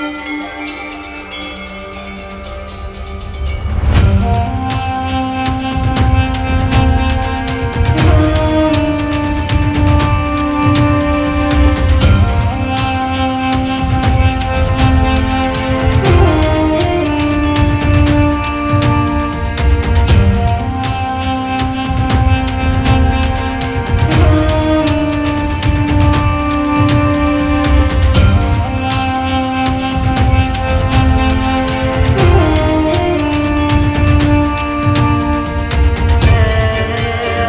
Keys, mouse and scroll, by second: 1.4-1.8 scroll up 11, 1.8 ctrl+s, 2.5 click, 3.3 click, 4.0-5.8 drag, 6.1 click, 7.2-7.8 shift+drag, 8.2 shift+click, 8.4 scroll down 1, 8.7 right click, 9.3 click, 9.5-10.8 right drag, 10.4-12.8 drag, 13.8-14.3 middle drag, 14.3 click, 14.4 shift+a, 16.0 click, 16.2 shift+a, 17.5-18.3 drag, 19.3 click, 21.1-23.4 drag, 24.3 click, 25.9-27.0 drag, 29.9-31.4 drag, 31.7 click, 32.7-37.4 drag.